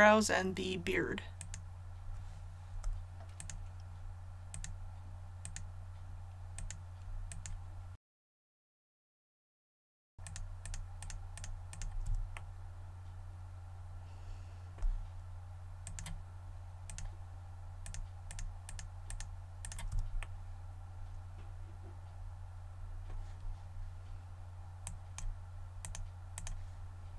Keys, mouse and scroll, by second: 1.4 right click, 3.3 shift+right click, 4.5 shift+right click, 5.4 shift+right click, 7.2 shift+right click, 7.9 middle click, 8.1 shift+middle click, 8.2 shift+right click, 8.5 scroll up 1, 8.6 shift+middle click, 8.7 shift+right click, 8.8 middle click, 9.0 shift+right click, 9.2 middle click, 9.2 shift+right click, 9.4 middle click, 9.5 middle click, 9.6 shift+right click, 9.7 middle click, 9.9 shift+right click.